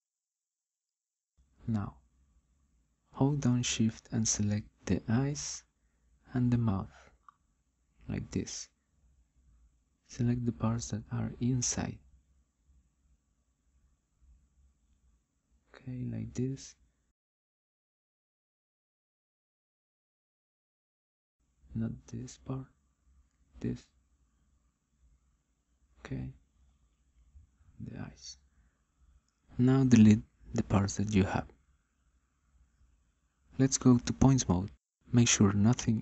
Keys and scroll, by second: 34.5 Delete.